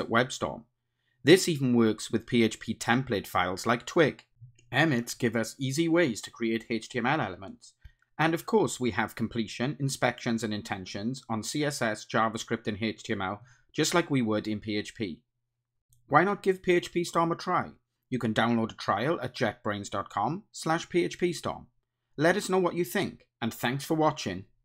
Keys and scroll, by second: 4.1 Tab, 6.7 Tab, 9.0 alt+Return, 14.6 Return.